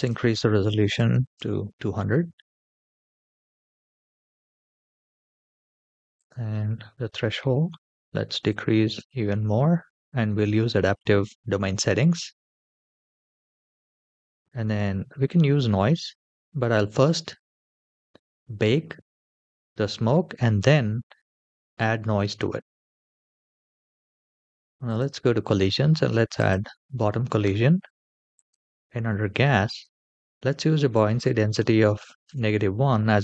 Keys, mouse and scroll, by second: 0.9 KP_0, 4.5-5.9 scroll down 3, 5.9-9.1 drag, 7.5 KP_0, 7.6 KP_0, 23.2-24.7 scroll down 2, 24.7 click, 26.5 click, 28.2 click, 29.4-32.5 drag.